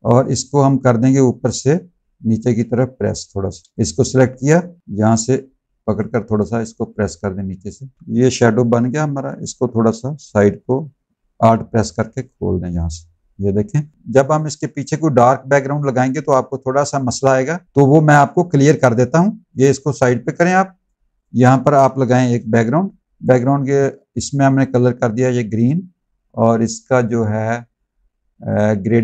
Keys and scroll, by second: 3.6 v, 8.1 v, 22.2 m.